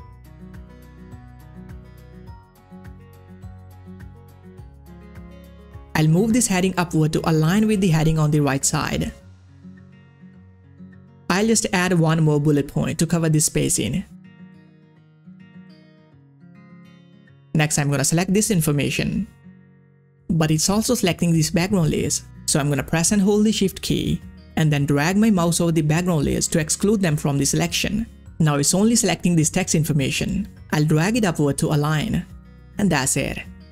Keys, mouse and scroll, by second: 3.3 click, 3.5 scroll down 1, 4.8 click, 5.4 shift+click, 7.3-12.8 drag, 12.8 ctrl+c, 13.7 click, 13.8 Return, 14.3 ctrl+v, 16.1 scroll down 1, 18.5-21.9 drag, 23.6 click, 23.7-29.9 shift+drag, 29.9-33.4 drag.